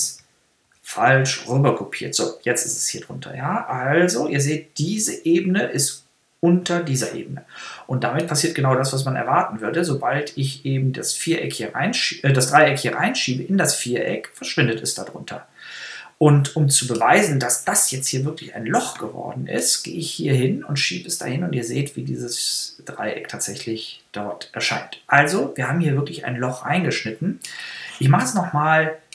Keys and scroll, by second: 0.4 super+z.